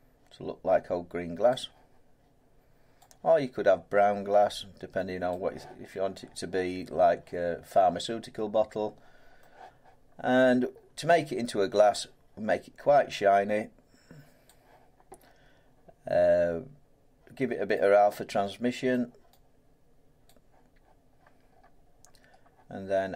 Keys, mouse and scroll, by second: 1.5 click, 5.3 click, 7.7 middle click, 8.3-8.9 scroll up 3, 9.4 middle click, 10.4-11.4 scroll up 5, 12.9-13.4 scroll, 14.4 scroll down 7, 14.4 click, 18.9 click, 20.2 click, 21.1-21.8 scroll down 7, 21.8 middle click, 22.3 middle click.